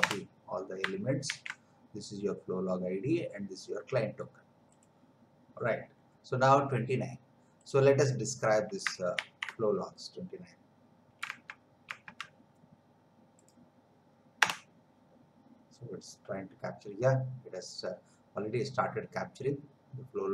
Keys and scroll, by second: 1.3 ctrl+v, 9.2 ctrl+c, 11.4 alt+Tab, 14.4 Return.